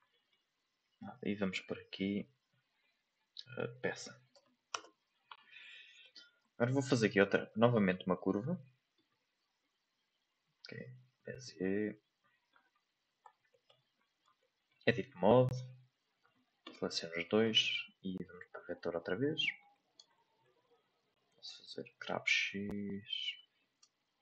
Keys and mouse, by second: 0.1 middle click, 2.0-5.2 drag, 5.7-6.0 shift+middle drag, 13.5 shift+middle drag, 14.4-14.7 shift+middle drag, 15.0 Tab, 16.2 a, 16.6 a, 17.4 v, 19.5 right click, 20.1 middle click, 21.0 g, 23.9 shift+middle click.